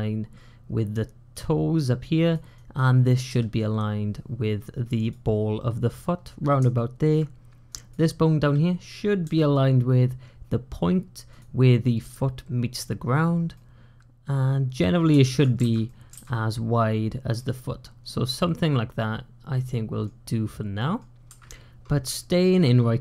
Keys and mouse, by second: 2.2 click, 2.6 click, 3.1 g, 6.6 shift+click, 7.5 click, 9.1 g, 13.4-14.9 middle drag, 15.1 shift+middle click, 15.4 alt+z, 15.7 middle click, 16.0 alt+z, 17.2-19.9 middle drag, 20.6 middle click, 22.1 shift+middle click.